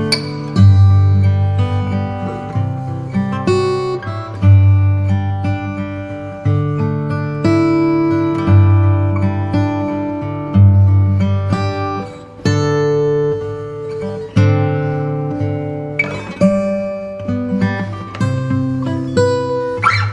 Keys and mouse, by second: 11.8 shift+d, 19.1-20.1 shift+r.